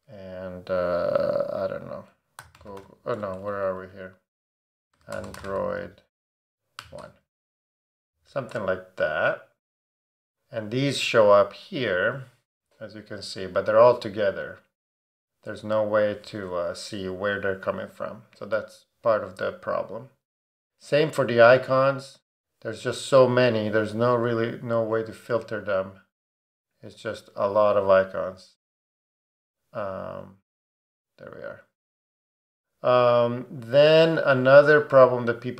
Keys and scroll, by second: 2.2-3.3 typing, 4.7-6.8 typing, 7.0 Return.